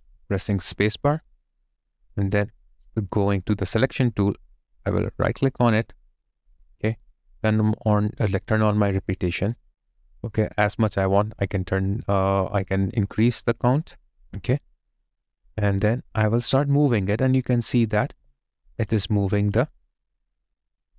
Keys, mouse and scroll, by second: 5.9 right click, 18.2 alt+click, 19.1 alt+middle click, 19.5 alt+click, 20.1 alt+right click.